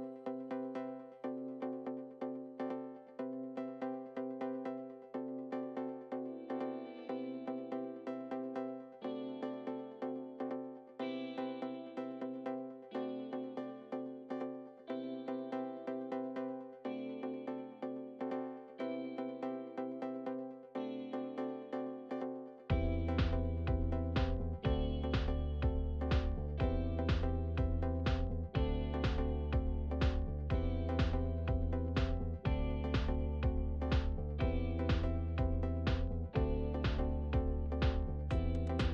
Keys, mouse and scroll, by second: 0.3 click, 0.8-3.5 shift+middle drag, 3.5-4.4 scroll down 7, 4.4-7.3 shift+middle drag, 7.3-8.0 scroll up 6, 8.0 click, 19.7 click, 19.9-20.4 scroll down 3, 20.4-25.5 shift+middle drag, 25.5-28.1 drag, 32.0-33.6 shift+middle drag, 33.6-34.2 scroll up 4, 34.2-34.8 scroll down 5, 35.0-36.2 shift+middle drag, 36.2-36.8 scroll up 4, 36.8-38.7 shift+middle drag, 38.7-38.9 scroll down 5.